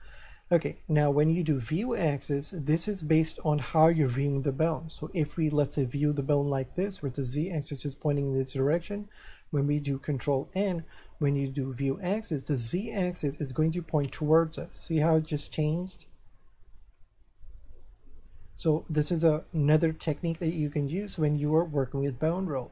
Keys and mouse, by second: 5.0 middle click, 10.3 ctrl+n, 12.0 click, 14.4 middle click, 17.2 ctrl+n, 17.8 click, 19.8 middle click.